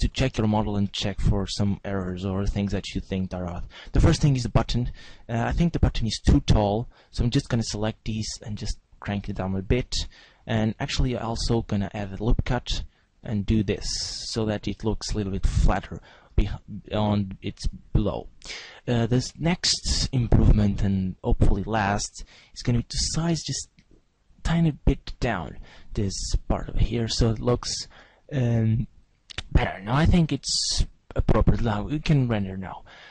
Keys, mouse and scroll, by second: 0.0-0.7 scroll down 1, 0.7 Tab, 2.0 z, 4.5 a, 5.6 c, 8.2 right click, 8.2 click, 9.8 a, 11.6 ctrl+r, 13.2 click, 13.9 Tab, 16.5-18.6 scroll down 5, 19.7 click, 19.7-20.5 scroll down 1, 21.4 right click, 22.4 z, 23.7 s, 25.3 click.